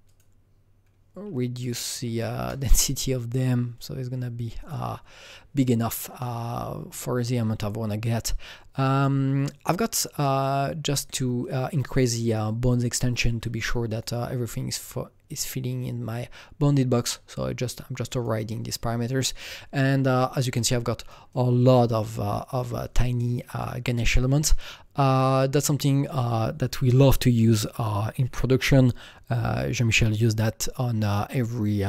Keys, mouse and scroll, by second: 0.0 click, 1.5 click, 1.6 double click, 1.9 KP_0, 2.3 KP_Enter, 4.6 click, 6.1 click, 6.7-7.3 scroll down 4, 7.8-8.9 scroll down 6, 8.9 click, 8.9 click, 9.4-10.1 scroll down 3, 10.1 click, 10.7-12.4 scroll down 2, 12.4-13.8 drag, 15.8-20.1 drag, 20.1-23.8 alt+drag, 20.6-28.5 alt+right drag, 25.6-28.5 drag.